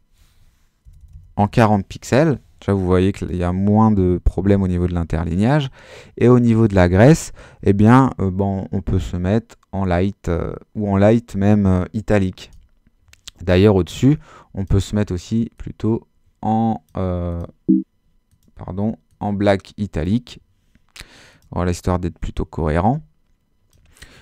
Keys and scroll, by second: 0.8-2.0 typing.